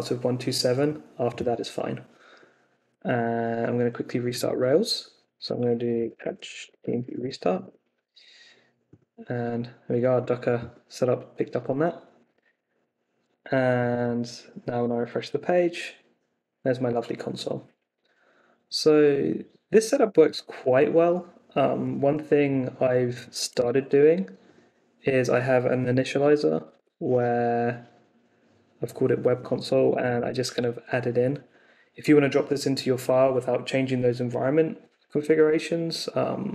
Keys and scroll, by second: 5.6-7.5 typing, 7.6 Return, 14.8 super+r, 22.3 shift+v, 22.9 Up, 23.3 d, 23.5 super+s, 25.9-27.2 typing, 26.1 super+s, 29.6-30.5 typing.